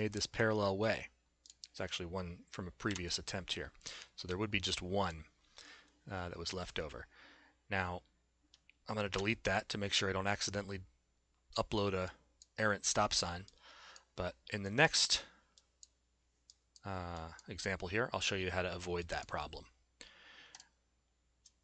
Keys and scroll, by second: 2.9 Delete, 9.2 Delete.